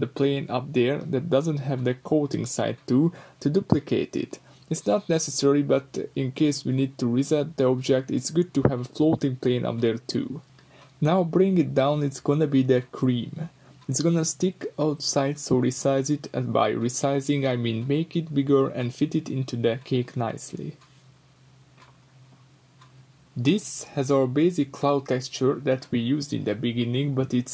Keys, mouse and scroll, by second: 0.0 click, 0.5 g, 1.2 click, 1.2 middle click, 1.7 click, 2.1 g, 3.0 click, 3.4 g, 4.5 click, 4.9 g, 5.7 click, 6.1 g, 7.0 click, 7.1-8.2 middle drag, 8.2 click, 8.3-8.9 middle drag, 8.5 scroll up 2, 9.3 middle click, 9.3 g, 10.0 click, 10.3 middle click, 10.3 g, 11.1 click, 11.7 click, 12.6 g, 14.8 click, 15.8 shift+click, 16.4 shift+click, 17.4 g, 18.8 click, 19.1 Tab, 19.2-24.0 middle drag, 19.7 scroll down 2, 23.4-24.0 scroll down 2, 24.0 click, 24.3 click, 24.8 shift+d, 25.9 click, 26.0-27.5 middle drag, 26.5-26.9 scroll up 2, 27.4-27.5 scroll up 2.